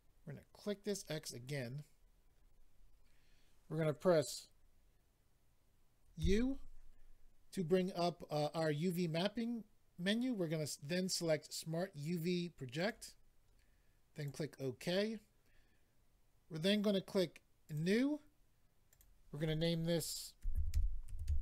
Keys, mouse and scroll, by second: 0.8 click, 0.9 click, 1.9-2.7 scroll up 4, 12.8 click, 12.9 click, 14.1 click, 14.2 click, 17.6 click, 17.7 click, 18.8 click, 18.9 click, 20.4-21.4 typing.